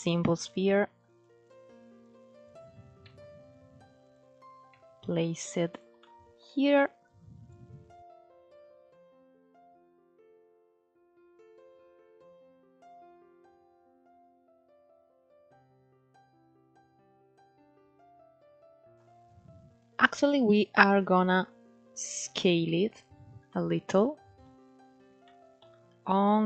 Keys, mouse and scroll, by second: 0.2 click, 0.7-1.7 right drag, 1.7 click, 2.3-2.7 scroll up 3, 2.7 s, 4.4 g, 5.6 scroll down 1, 5.7-6.7 middle drag, 6.7 click, 7.8 KP_1, 8.3 alt+z, 8.5-9.4 scroll up 4, 9.4 g, 10.6 s, 12.0-13.3 scroll up 2, 13.3-14.3 shift+middle drag, 14.3 alt+z, 14.6-14.9 scroll down 3, 14.9-19.4 middle drag, 19.4 click, 20.1 middle click, 21.0 click, 22.2 KP_Decimal, 22.8 scroll down 8, 23.2-24.2 middle drag, 24.2-24.9 scroll up 2, 24.9-26.2 shift+middle drag, 26.2 s.